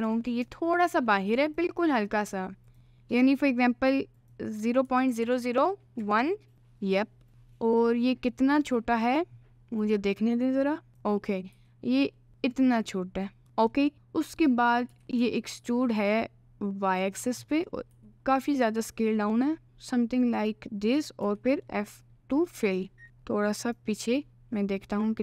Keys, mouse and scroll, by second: 2.7 click, 4.1-6.5 drag, 5.2 0, 7.6 middle click, 8.6 click, 10.9 click, 11.6 s, 13.4 middle click, 13.9 middle click, 14.9 e, 17.5 middle click, 17.9 s, 21.2 f, 21.7 middle click, 22.4 middle click, 23.0 g.